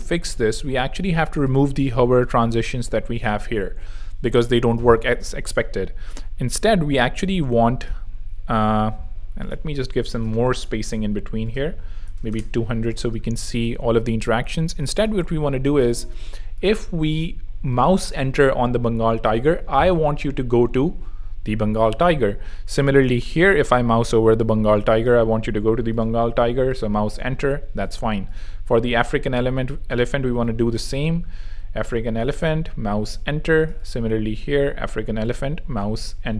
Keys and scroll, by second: 11.0-13.4 typing.